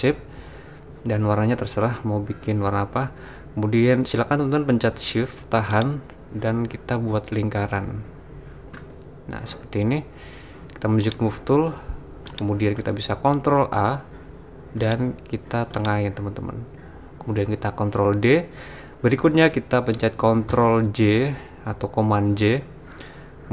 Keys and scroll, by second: 13.6 super+a, 18.0 super+d, 20.5 super+j.